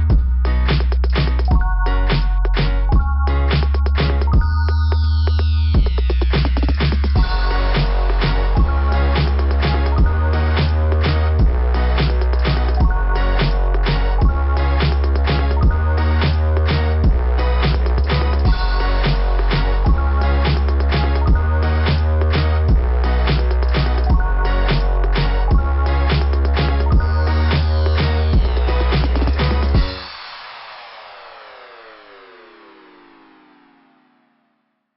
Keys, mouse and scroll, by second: 0.9 click, 2.7 scroll down 2, 13.1 click, 13.5 click, 13.9 click, 14.2 click, 15.2 click, 15.9-16.7 scroll up 5, 17.8-18.2 scroll up 4, 18.5 scroll down 2, 19.1 scroll up 2, 19.2 scroll down 2, 19.4 scroll up 2, 19.5 scroll down 2, 19.7 scroll up 2, 19.8 scroll down 1, 19.9 scroll up 1, 20.4 scroll down 1, 20.5 scroll up 1, 20.6 scroll down 3, 20.8 scroll up 2, 20.9 scroll down 3, 21.8 scroll down 2, 22.5 scroll down 2, 25.3 scroll down 1, 27.7 right click, 28.0 right click, 29.6 click, 30.4 right click, 33.7 click.